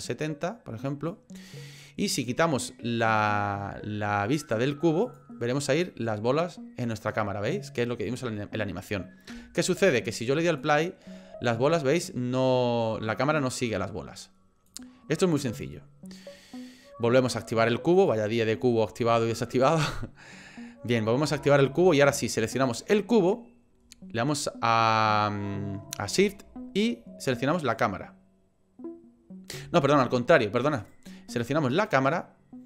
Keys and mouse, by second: 5.0 click, 10.7 click, 14.7 click, 15.5 click, 18.0 click, 20.5 middle click, 21.4 shift+middle click, 22.7 click, 27.6 shift+click, 30.8 click, 31.8 click.